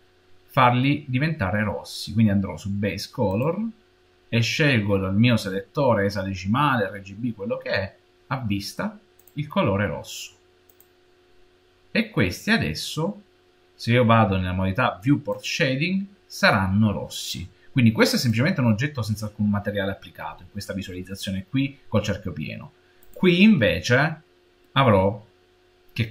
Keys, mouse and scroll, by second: 3.1 click, 12.0-15.1 middle drag, 15.4 click, 18.1 click, 22.9 click, 24.7 middle click, 25.1-26.1 middle drag.